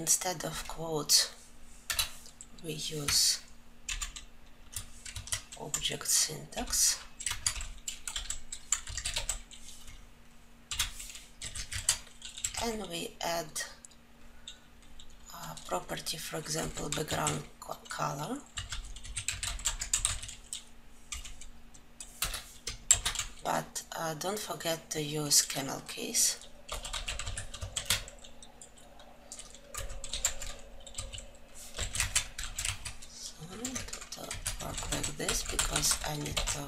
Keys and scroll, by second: 33.4 ctrl+;, 36.2 ctrl+alt+j.